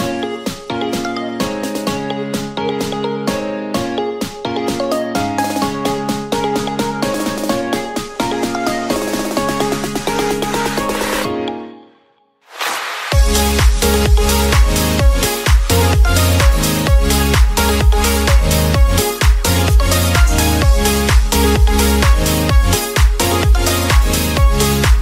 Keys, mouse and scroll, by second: 1.5 click, 2.8 click, 4.1-9.5 middle drag, 9.5 scroll up 1, 10.7 ctrl+r, 13.5 ctrl+r, 16.1 middle click, 16.8 ctrl+r, 18.8-19.3 scroll down 2, 19.3 middle click, 19.8 Tab, 20.0 click, 20.5-22.6 middle drag, 22.6-23.2 scroll down 2, 23.2-24.1 middle drag, 24.1 click.